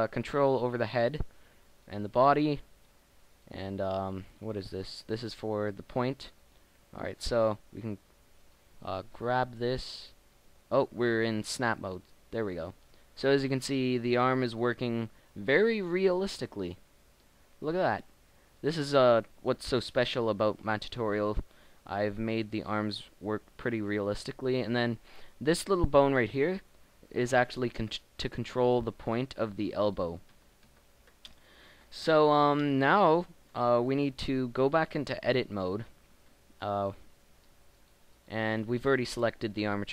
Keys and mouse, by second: 1.2 r, 2.0 r, 5.4 r, 7.7 r, 9.4 g, 10.7 middle click, 12.0 g, 13.3 middle click, 15.4 g, 17.0 middle click, 18.5-19.9 middle drag, 19.9 g, 21.2 middle click, 23.2 g, 27.5 g, 30.5 ctrl+z, 30.7 ctrl+z, 34.5 Tab, 36.0 Tab, 36.2 Tab, 36.4 Tab, 39.6 KP_1.